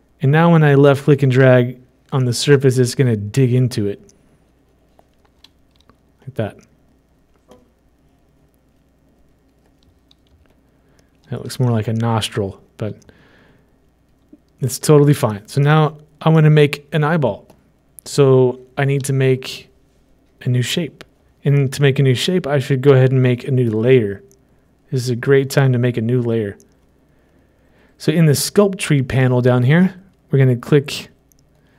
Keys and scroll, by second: 6.3 typing, 11.9 typing.